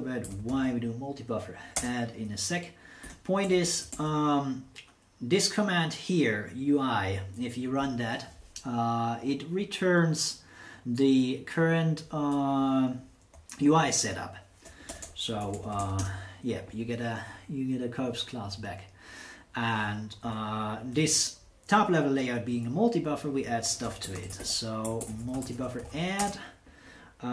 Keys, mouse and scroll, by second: 0.0-4.4 typing, 13.3 BackSpace, 14.0 BackSpace, 14.0 BackSpace, 14.1 BackSpace, 15.2-16.3 typing, 23.4-26.4 typing.